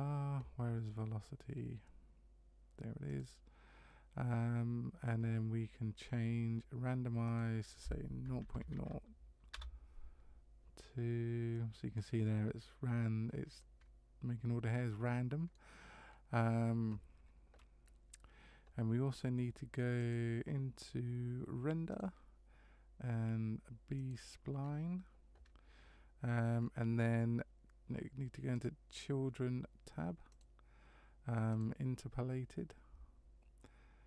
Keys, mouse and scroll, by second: 3.1 click, 7.2 click, 11.5 middle click, 12.3-12.7 scroll up 1, 13.6 middle click, 16.1 scroll down 1, 17.8 scroll down 1, 20.0 click, 21.9 click, 24.0 click, 24.6 scroll up 2, 26.6 scroll down 2, 28.5 click, 30.3 click, 31.6 click.